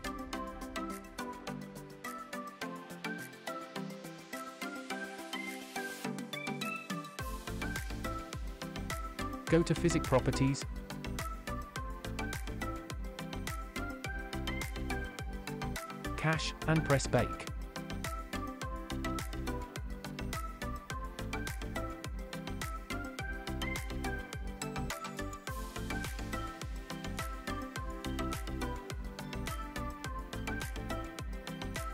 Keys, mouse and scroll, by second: 2.2 n, 7.8 click, 9.5 click, 10.7-12.4 scroll down 8, 12.4-14.2 scroll down 4, 14.2-14.5 scroll down 2, 16.2 click, 17.4-20.1 drag, 21.3-31.9 drag.